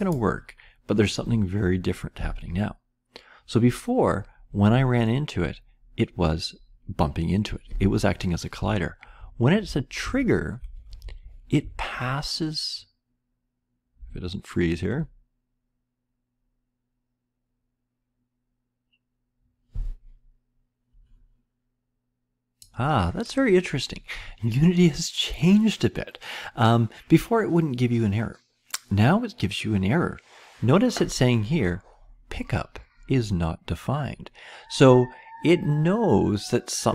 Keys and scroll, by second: 9.1 Up, 9.1 Down, 9.1 Right, 10.0 Up, 10.0 Left, 10.7 Up, 10.7 Right, 11.0 Up, 11.0 Right, 11.6 Right, 13.9-14.9 Left.